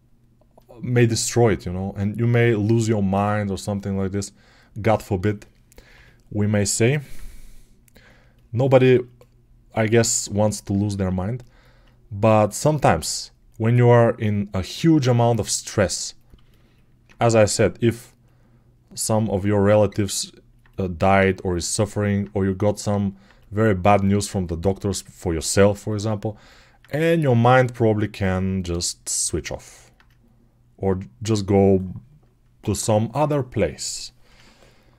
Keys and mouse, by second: 5.8-29.6 drag, 5.8 g, 10.9 alt+q, 29.6-34.9 alt+right drag.